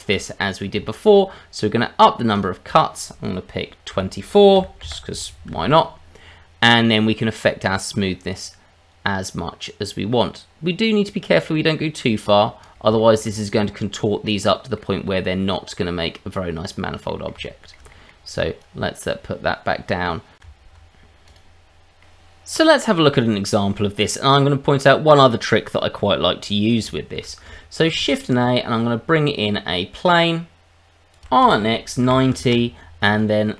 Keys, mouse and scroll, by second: 0.9 shift+middle click, 2.3 click, 2.7 click, 7.3 click, 13.0 shift+middle click, 13.4-14.5 scroll up 3, 14.5 scroll down 1, 14.7 middle click, 16.7-17.1 scroll down 2, 17.1 middle click, 17.4 shift+middle click, 17.9 middle click, 18.6 click, 20.7 Tab, 21.2 click, 22.0 middle click, 24.1 middle click, 25.1-26.8 scroll up 2, 26.8 scroll up 1, 26.9 shift+middle click, 27.9 shift+a, 31.2 r, 31.4 x, 32.0 KP_9, 32.1 KP_0, 32.4 KP_Enter, 33.1 middle click.